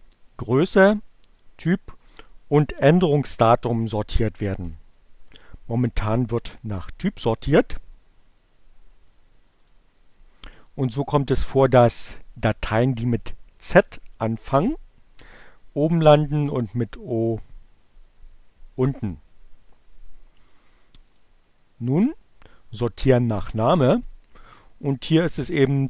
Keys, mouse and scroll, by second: 9.4 click, 10.7 click, 17.2 click, 21.0 click, 22.4 click, 25.0 click.